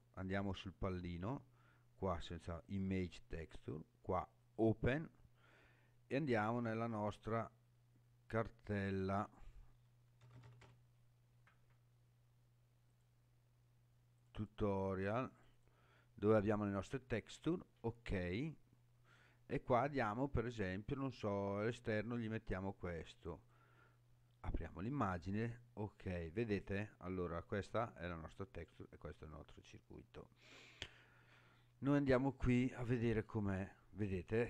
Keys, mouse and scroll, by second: 0.4-2.8 drag, 4.4 click, 28.1-30.3 scroll down 2, 30.9-31.3 scroll up 3, 31.8-32.9 scroll up 2, 32.9-33.9 scroll down 1, 34.0-34.4 scroll down 2.